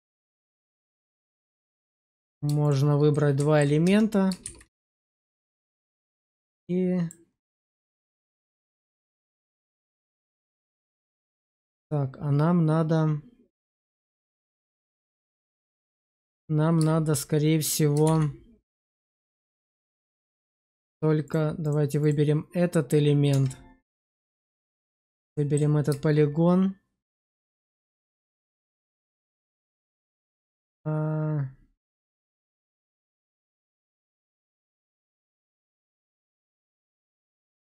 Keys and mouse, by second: 0.1 shift+click, 1.4-1.9 middle drag, 3.0-3.5 alt+middle drag, 3.7 Tab, 4.4 shift+z, 4.7 shift+middle click, 5.7 click, 6.3 click, 7.6-15.6 middle drag, 18.0 shift+z, 18.7 shift+z, 19.0 shift+middle click, 19.4 click, 20.1 Tab, 20.5 click, 21.1 click, 23.2 Tab, 24.4 click, 24.8 middle click, 27.8-32.3 middle drag, 32.9 click, 33.0 click, 35.0-36.6 middle drag, 37.3 shift+middle click.